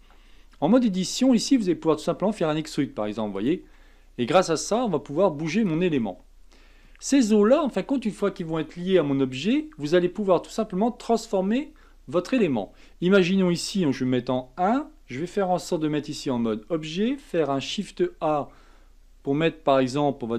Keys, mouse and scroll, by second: 0.7 Tab, 2.2 e, 3.6 e, 4.7 e, 6.0-9.0 middle drag, 12.7-14.0 scroll down 1, 14.0 KP_1, 16.2 Tab, 17.5 shift+a.